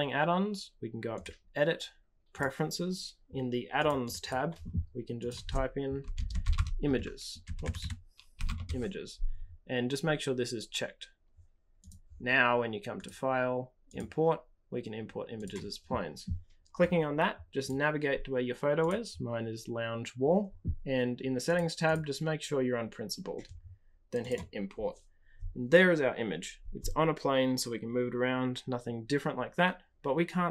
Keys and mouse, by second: 1.1-2.6 drag, 12.9-15.5 drag.